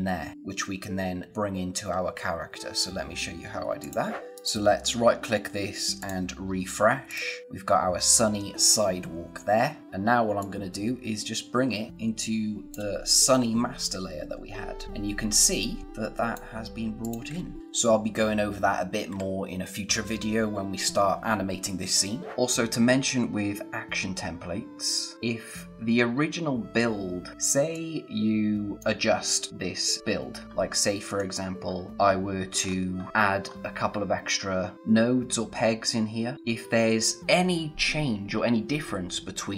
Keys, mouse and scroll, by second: 3.8 click, 4.3 right click, 5.9 click, 10.3 click, 17.6-18.9 scroll up 1, 20.3 scroll down 1, 22.5 click, 25.1-26.6 scroll up 1, 27.7 click, 30.5 click, 30.6-31.1 scroll up 1, 31.1 click, 31.6 scroll down 1, 32.7-33.5 scroll up 1, 36.3-37.2 scroll down 1.